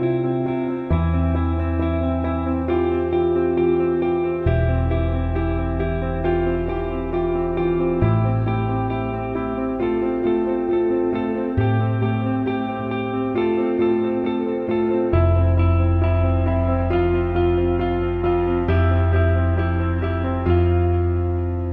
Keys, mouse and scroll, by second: 1.4-6.7 drag, 9.7 click, 9.8-12.2 drag, 12.2-16.2 drag, 17.5 click, 19.1-21.7 drag.